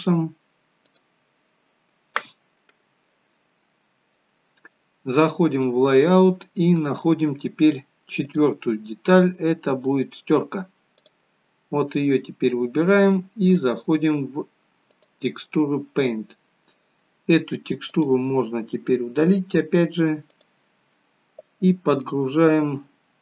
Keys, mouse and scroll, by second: 5.6 click, 6.5 scroll down 1, 8.5-9.6 scroll down 3, 12.1 click, 12.1 scroll up 3, 13.5 click, 16.5-17.8 scroll down 1, 17.8 click, 17.8-18.5 scroll down 1, 18.5-18.9 scroll down 4, 19.4 scroll down 11, 20.2 click.